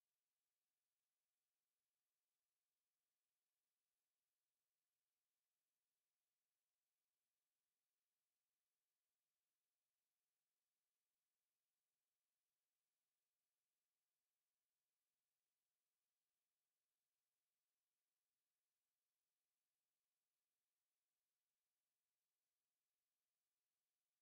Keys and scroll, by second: 14.1 ctrl+z.